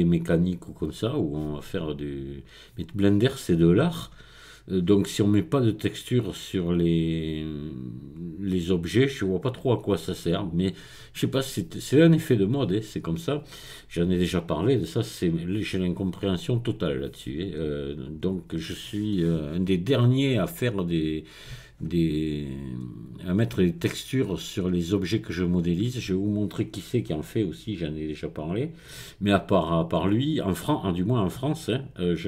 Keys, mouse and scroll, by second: 25.4 click, 26.3 click, 28.4 click, 31.7-32.2 scroll down 1.